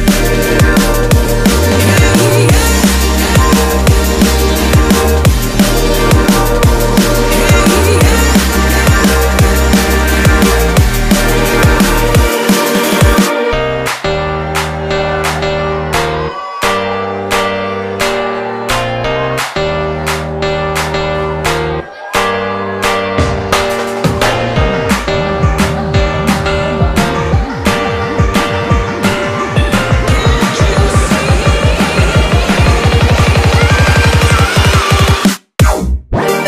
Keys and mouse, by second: 1.1-5.1 ctrl+middle drag, 5.2 ctrl+r, 11.1 ctrl+r, 14.7 click, 15.3-18.6 middle drag, 18.6 ctrl+KP_6, 18.8 ctrl+KP_6, 19.0 ctrl+KP_6, 19.1 ctrl+KP_6, 20.6 shift+click, 21.3-23.4 middle drag, 23.4 shift+click, 24.4-26.4 middle drag, 26.4 shift+click, 27.2-29.5 middle drag, 29.5 shift+click, 30.7 shift+click, 31.0-32.3 middle drag, 32.3 shift+click, 32.8 middle click, 33.7 shift+click, 34.1 middle click, 35.0 shift+click, 35.6 x.